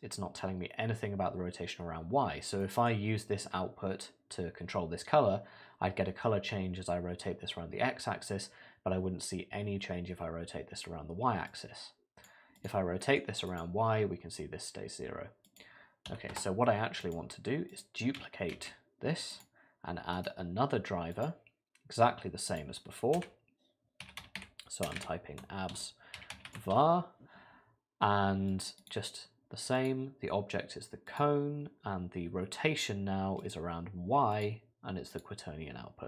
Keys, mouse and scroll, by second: 2.6 middle click, 11.5 click, 12.6 click, 13.0 middle click, 13.5 click, 15.5 click, 17.0 click, 17.7 click, 18.5 shift+d, 20.1 right click, 28.8 click.